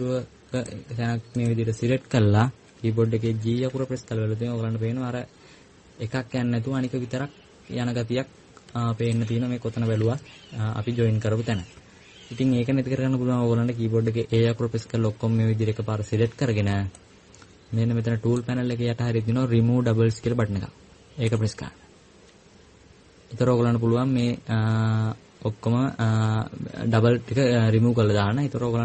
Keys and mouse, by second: 1.5 right click, 11.5 right click, 15.1 a, 15.4 a.